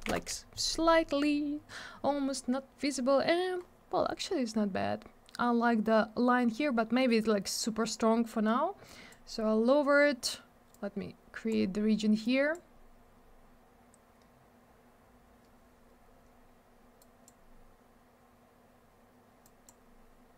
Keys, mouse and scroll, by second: 0.1 Return, 1.2-1.7 scroll up 1, 3.6 scroll up 1, 4.1 scroll down 1, 8.8 click, 10.7 click, 12.2 click, 17.0 click, 19.4 click.